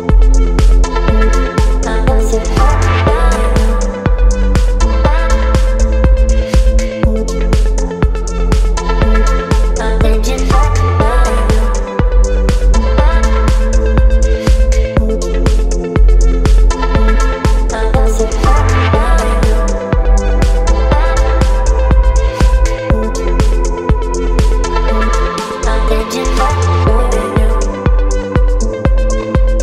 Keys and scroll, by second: 5.0 ctrl+t, 9.0 Return, 12.4 space, 13.5 space, 19.1 ctrl+j, 19.7 ctrl+e, 25.7 space.